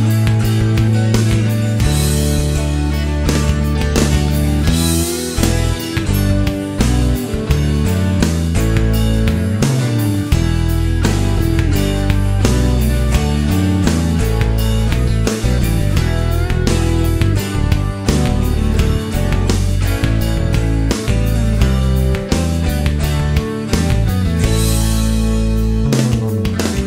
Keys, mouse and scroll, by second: 0.4-1.0 scroll up 1, 1.1-2.2 scroll up 2, 2.3-2.9 scroll up 1, 2.9-3.3 scroll up 1, 3.5 middle click, 4.5-4.8 scroll up 1, 4.8 middle click, 5.8 scroll up 1, 6.3-8.8 middle drag, 11.4 click, 12.2 click, 13.8 click, 15.4 click, 16.7 click, 17.5 middle click, 21.6 click, 22.2-23.2 middle drag, 24.7 click, 25.9 shift+o.